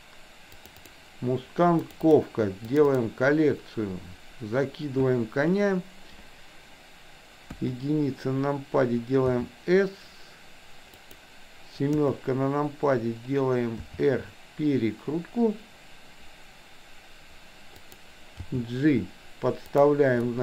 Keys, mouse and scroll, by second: 7.6 KP_1, 9.3 s, 11.9 KP_7, 13.8 r, 18.4 g, 20.3-20.4 middle drag.